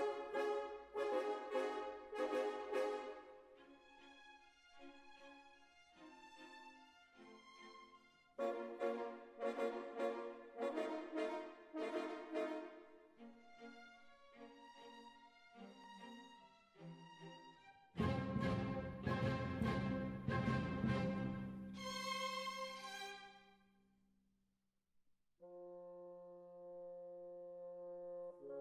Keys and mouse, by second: 0.1-1.1 middle drag, 1.1 space, 6.2 KP_1, 7.3-8.4 right drag, 8.2 g, 9.0-10.4 right drag, 9.7 g, 11.2-12.3 right drag, 11.7 g, 12.5-13.8 middle drag, 13.8 g, 14.8 KP_1, 16.4 g, 19.7-21.2 middle drag, 21.2 right click, 21.5 click, 22.1 click, 22.1 right click, 22.8 click, 22.8 right click, 24.0 click, 24.0 right click, 25.9-28.6 drag.